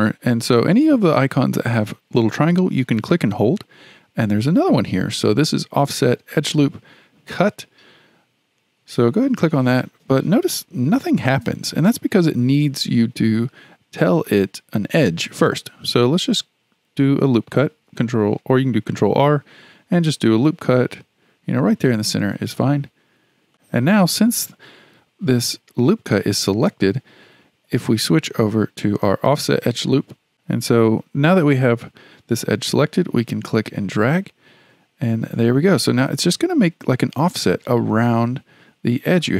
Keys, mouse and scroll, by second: 3.0-6.1 drag, 16.4-19.5 drag, 20.4-23.5 drag, 28.1-30.3 drag, 30.3-32.3 shift+middle drag, 33.3-36.4 drag.